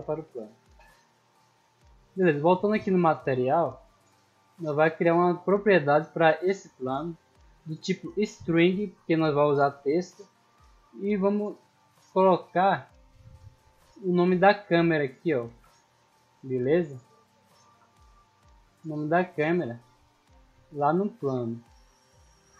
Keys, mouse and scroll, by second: 2.0 click, 6.2 click, 7.6 click, 8.6 click, 9.7 click, 11.2 middle click, 11.9 middle click, 12.5 click, 12.9-13.3 middle drag, 14.2 right click, 14.7 right click, 15.5 n, 16.7 click, 17.6 ctrl+c, 18.2 click, 20.6 shift+middle drag, 21.2 n, 22.0 right click.